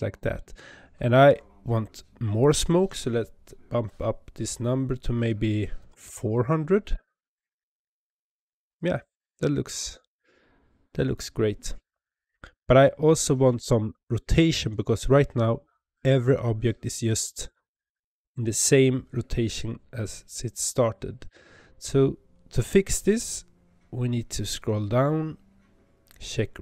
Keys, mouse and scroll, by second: 0.3-2.3 scroll up 18, 2.3-5.3 drag, 6.1 KP_0, 13.3 space.